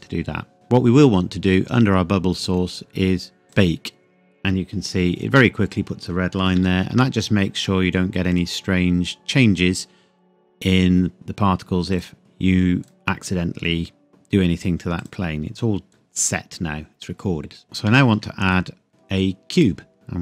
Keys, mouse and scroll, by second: 1.5 click, 2.3-3.4 scroll down 1, 3.4 click, 6.5 ctrl+s, 8.3 click, 11.9 click, 14.9 click, 17.9 shift+a, 19.6 click, 19.9 g.